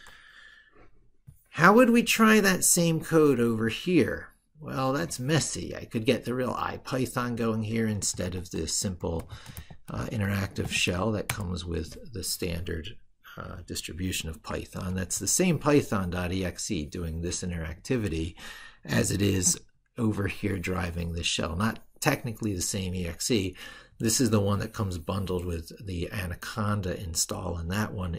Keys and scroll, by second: 3.3 ctrl+super+Right, 19.3 ctrl+super+Left.